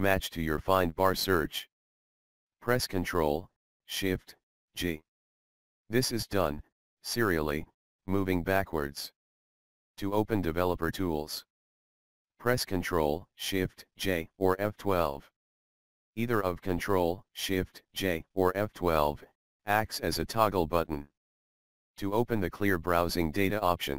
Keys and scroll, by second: 1.4 ctrl+shift+c, 14.7 ctrl+shift+j, 18.4 F12.